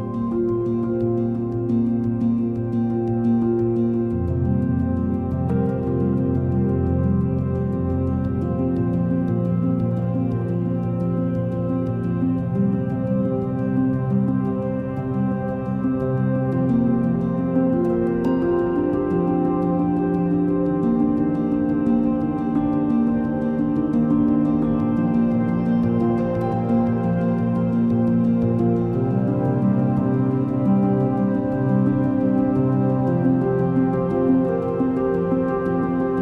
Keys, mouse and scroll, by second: 1.6 s, 5.2 Tab, 6.6 g, 10.9-11.6 scroll up 3, 12.0 ctrl+a, 13.8 ctrl+a, 15.4 ctrl+a, 16.7-17.8 scroll down 4, 17.8 shift+a, 20.0 scroll up 1, 20.7 s, 22.7-23.2 scroll up 7, 23.7 s, 25.6 ctrl+a, 27.8 click, 30.0-31.7 drag, 31.9-36.2 drag.